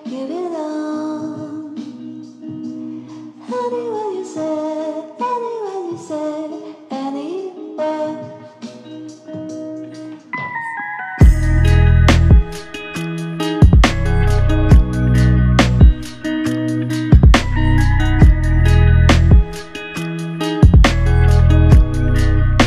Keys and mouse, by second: 12.4 ctrl+click, 22.1 ctrl+click.